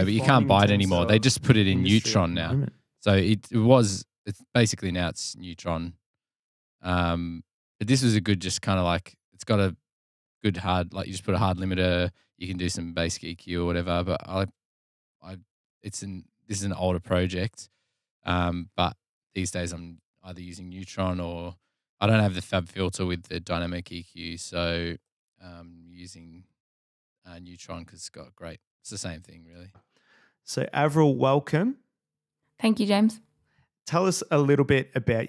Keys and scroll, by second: 19.7 Delete, 20.7 f, 22.4 g, 26.5 super+[, 31.1 Delete, 32.7 f, 33.5 g.